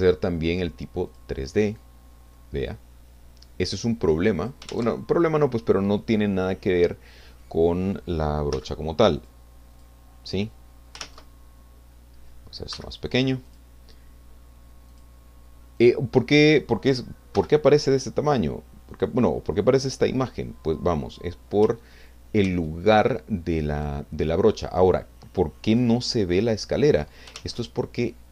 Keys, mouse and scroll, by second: 1.1 click, 1.8-4.6 drag, 4.7 ctrl+z, 8.5 f, 9.2 click, 9.7 click, 11.0 ctrl+z, 12.7 f, 13.5 click, 14.9 click, 15.8 click, 17.3 f, 18.9 click, 19.7 click, 20.9-21.4 scroll down 3, 22.4 ctrl+z, 25.7 click, 27.6 ctrl+z.